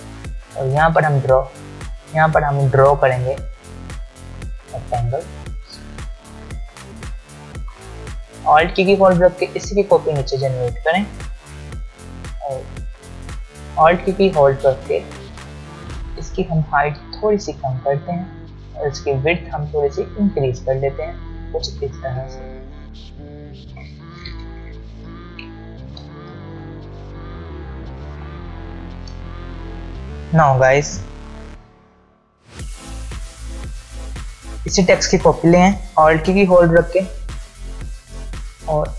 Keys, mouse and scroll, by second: 1.0 alt+scroll up 1, 2.0 alt+scroll down 1, 3.4-6.6 click, 7.7 v, 8.8-11.6 alt+drag, 23.7 ctrl+z, 26.1 click, 27.5-29.8 alt+scroll up 2, 32.9 alt+scroll down 2, 33.1 space, 33.2 click, 36.4-37.6 alt+drag.